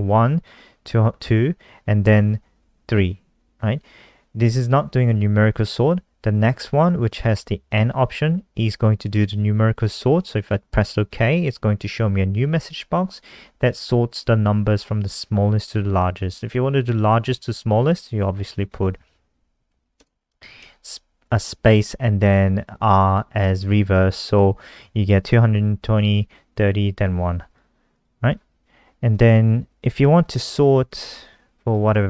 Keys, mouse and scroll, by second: 10.9 click, 18.3 click, 19.1 Up, 19.4 Down, 19.6 End, 20.1 r, 20.5 ctrl+s, 21.7 F5, 23.0 click, 28.2-29.0 scroll down 4, 29.0 click, 30.0 ctrl+c, 30.3 click, 31.0 click, 31.8 ctrl+v.